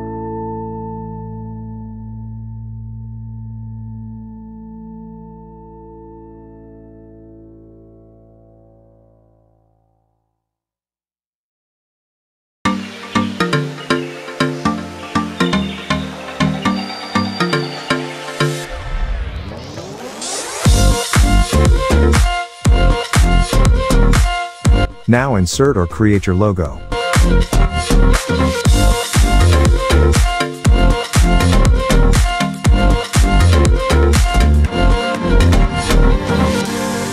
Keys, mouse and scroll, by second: 0.6 click, 2.5-6.9 typing, 7.0 ctrl+a, 8.0 click, 8.5 alt+scroll down 1, 8.8 click, 10.4 ctrl+g, 11.2 click, 16.1-16.4 alt+scroll down 1, 16.7 alt+scroll up 2, 17.1-18.0 drag, 18.8 ctrl+g, 19.8 click, 19.9 ctrl+shift+g, 20.3 click, 21.1 alt+scroll up 1, 21.7 alt+scroll up 1, 22.0 space, 22.1 click, 22.3 space, 23.1 click, 24.3 alt+scroll up 1, 24.6 space, 24.7-27.0 drag, 28.1 click, 30.2 alt+scroll up 1, 30.9-31.8 alt+drag, 32.5 ctrl+d, 33.0-36.4 drag.